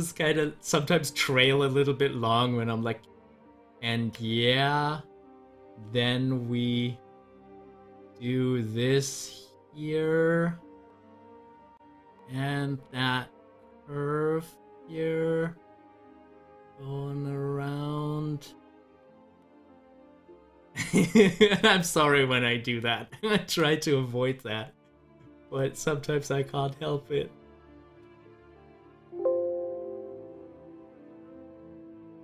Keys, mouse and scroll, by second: 6.6-18.1 drag, 20.5-32.2 drag.